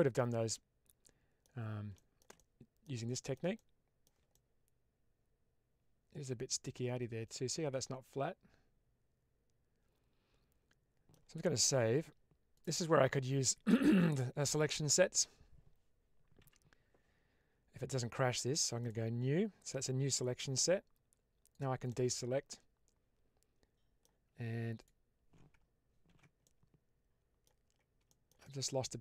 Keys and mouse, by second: 1.8 shift+middle click, 2.2 middle click, 3.0 shift+middle click, 3.4 middle click, 4.2-11.0 middle drag, 11.6 ctrl+s, 16.3 n, 18.7 click, 21.8-23.9 middle drag, 24.8 alt+click, 26.0 ctrl+x, 26.3-27.3 middle drag, 28.1 middle click, 28.3-29.0 middle drag.